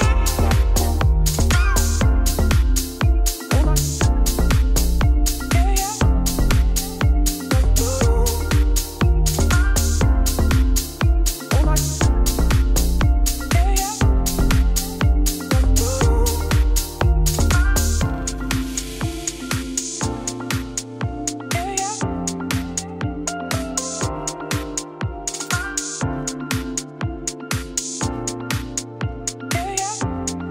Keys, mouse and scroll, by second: 0.1 Tab, 1.5 click, 2.1-3.2 drag, 3.7 click, 5.3 click, 6.2 click, 6.5-6.9 scroll down 14, 6.9 shift+middle click, 7.8 click, 8.6-11.0 drag, 11.4 a, 11.7 a, 12.0 a, 12.1 click, 12.5 middle click, 12.6-13.8 scroll down 1, 14.3-14.6 scroll up 1, 14.6 click, 15.1-15.5 scroll down 1, 15.5 shift+click, 15.9 ctrl+l, 16.4 click, 16.6 right click, 17.5 click, 17.8 click, 18.4 scroll down 1, 18.6 ctrl+s, 18.9 shift+middle click, 19.6 click, 20.9 shift+middle click, 21.5 scroll down 5, 22.0-22.3 scroll up 1, 22.3 ctrl+l, 23.5 scroll up 2, 25.5 click, 25.6 right click, 26.5-27.7 shift+drag, 29.1 Tab, 30.3 KP_0.